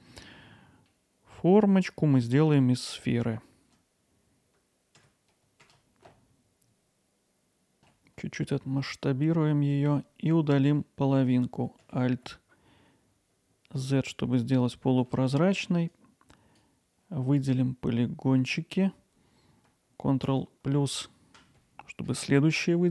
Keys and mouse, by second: 0.9 middle click, 2.2 middle click, 4.5 Tab, 4.6 shift+a, 6.3 middle click, 6.6 ctrl+alt+middle click, 6.8 alt+middle click, 6.9 middle click, 7.2 Tab, 7.8 s, 8.5 z, 9.7 click, 10.4 alt+middle click, 12.1 alt+z, 14.0-15.1 alt+middle drag, 16.1-19.7 drag, 20.3 ctrl+KP_Add.